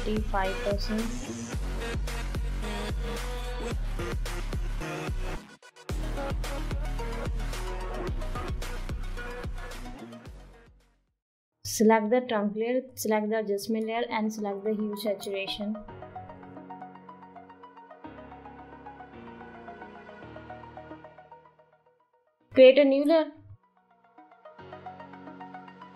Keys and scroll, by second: 1.9 [, 9.5 [, 9.5 [, 9.6 [, 25.8 ].